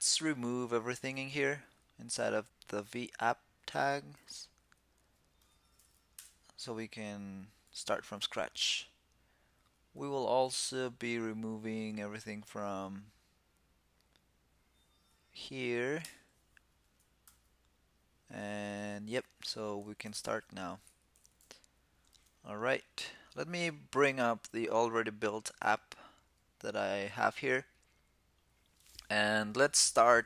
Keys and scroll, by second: 5.2 shift+super+Right, 7.4 super+s, 17.0 super+s, 19.1 super+Left, 20.0 super+s.